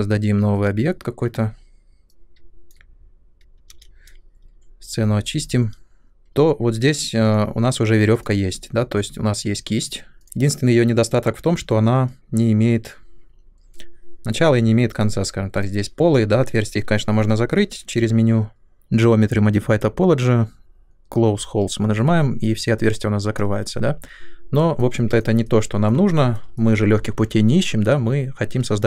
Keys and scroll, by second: 3.6 ctrl+n, 6.0 ctrl+n.